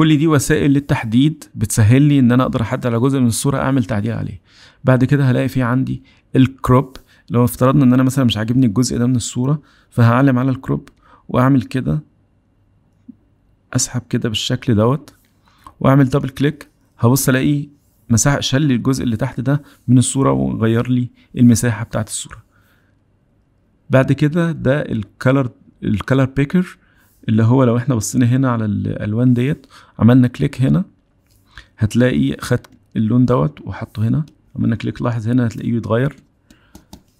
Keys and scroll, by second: 6.2 c.